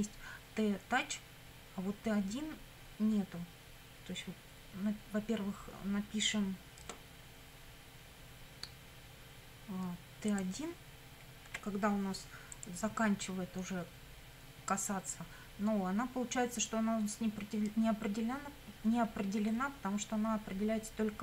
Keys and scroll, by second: 11.5 1.